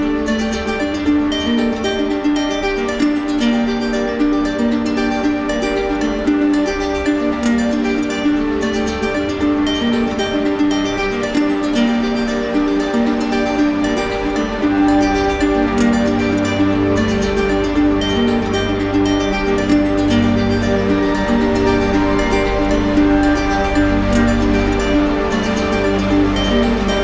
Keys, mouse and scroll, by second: 4.8 click, 6.3 click, 17.8 click, 19.1 click, 21.2 click, 21.7 click, 21.9 click, 22.5 shift+click, 24.3 click, 25.4 click, 26.2 click.